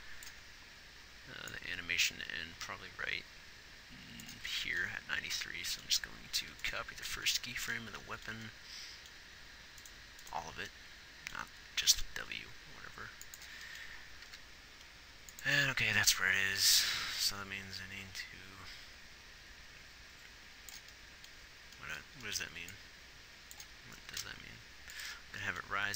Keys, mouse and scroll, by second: 11.9 shift+d, 14.3 g, 17.6 click, 24.2-25.9 drag.